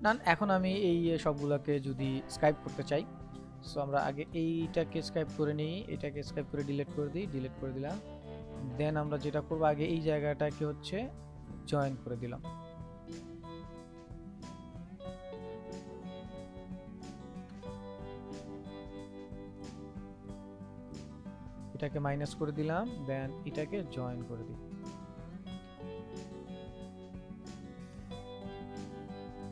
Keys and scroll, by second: 3.4 ctrl+z, 25.5 ctrl+z.